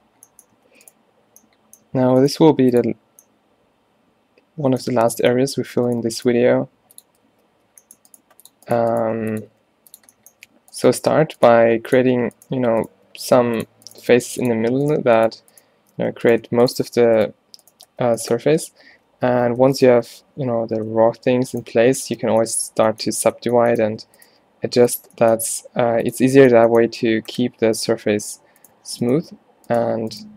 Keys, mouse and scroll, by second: 0.6 a, 2.4 g, 6.5 e, 7.3 shift+Tab, 8.3 g, 9.0 g, 9.6 e, 11.2-14.0 typing, 16.0 f, 18.0 f, 19.0 ctrl+z, 19.4 ctrl+z, 20.7 ctrl+z, 22.3 f, 23.3 a, 24.4 g, 25.8 g.